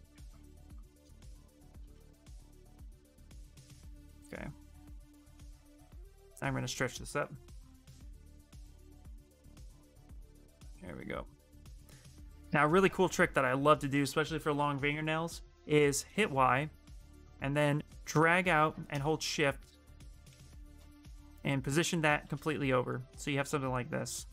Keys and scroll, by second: 0.4 q, 1.5 q, 2.2 ctrl+w, 15.8 ctrl+y.